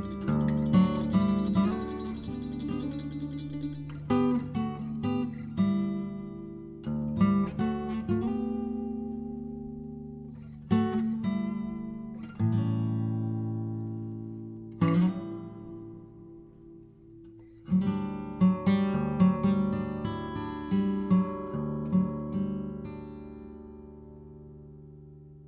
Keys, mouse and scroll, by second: 9.3 c, 15.5 ctrl+click, 16.0 ctrl+click, 16.5 ctrl+click, 17.6 ctrl+click, 17.9 ctrl+click, 18.7 ctrl+click, 19.1 ctrl+click, 19.5 ctrl+click, 20.4 ctrl+click, 20.9 ctrl+click, 21.3 ctrl+click, 22.3 ctrl+click, 22.8 ctrl+click, 23.7 ctrl+click, 24.1 ctrl+click, 24.7 ctrl+click.